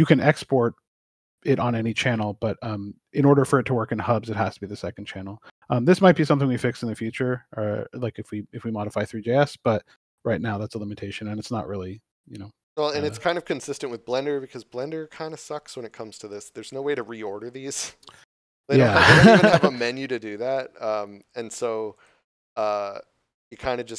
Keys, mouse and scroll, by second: 2.4 click, 15.8 click, 21.2 click.